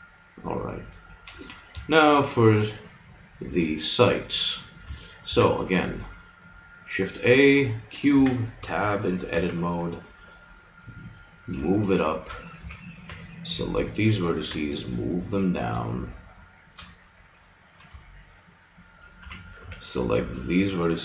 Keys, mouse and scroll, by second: 5.3 shift+a, 8.1 Tab, 9.3 g, 11.4-12.5 drag, 12.6 a, 13.0-14.5 drag, 13.0 b, 14.5 g, 16.4-17.4 middle drag, 19.2 a, 19.6 b.